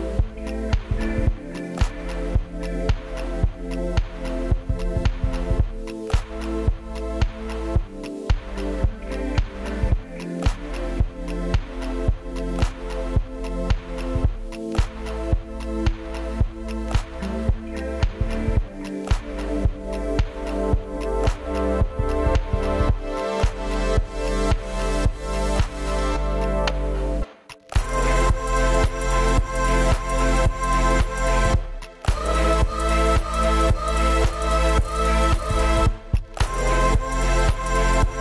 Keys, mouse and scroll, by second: 0.8 middle click, 1.2 s, 1.4 scroll up 4, 1.7 middle click, 1.9 y, 5.1-6.8 scroll up 10, 7.7 scroll down 7, 7.8 middle click, 8.2 space, 8.5 middle click, 9.6 middle click, 9.8 y, 10.3 shift+click, 10.5 scroll down 9, 11.0 middle click, 11.3 shift+middle click, 11.4 shift+middle click, 11.8 middle click, 12.0 scroll down 4, 12.1 shift+middle click, 12.4 shift+middle click, 12.5 scroll up 5, 12.7 middle click, 13.3 middle click, 13.6 middle click, 13.8 shift+middle click, 15.2 space, 17.0 m, 17.3 space, 17.4 middle click, 17.6 s, 18.0 -, 18.2 Return, 20.3 space, 20.6 scroll up 4, 21.4 shift+click, 21.6 space, 21.7 m, 22.6 scroll down 9, 22.9 shift+middle click, 23.3 middle click, 23.4 middle click, 23.6 shift+middle click, 23.9 shift+middle click, 24.6 scroll up 10, 24.9 r, 25.2-25.6 scroll down 5, 25.8 Up, 26.1 scroll up 3, 26.4 space, 26.6 middle click, 27.4 ctrl+z, 27.9 scroll down 5, 28.1 double click, 28.4 double click, 28.5 Escape, 28.6 scroll up 1, 28.6 r, 29.0-29.4 scroll down 4, 29.4 scroll up 1, 29.6 double click, 30.1 Escape, 30.2 F2, 30.4 double click, 30.7 Escape, 30.8 double click, 30.9 double click, 31.2 scroll up 1, 31.4 p, 31.6 scroll down 19, 32.2 space, 32.4 double click, 32.5 double click, 32.7 Escape, 32.9 double click, 33.1 double click, 33.3 double click, 33.4 g, 33.5 Escape, 33.6 Escape, 33.7 Escape, 33.8 middle click, 34.0 middle click, 34.2 F3, 34.3 scroll down 6, 34.5 middle click, 35.8-36.2 scroll down 13, 36.2 middle click, 37.2 scroll up 6, 37.4 shift+middle click, 37.8 scroll up 3, 38.0 middle click.